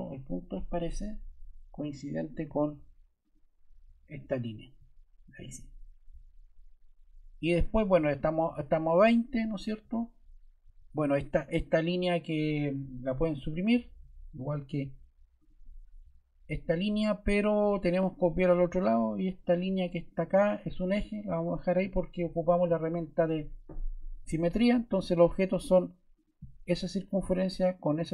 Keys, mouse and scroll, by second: 16.0 BackSpace.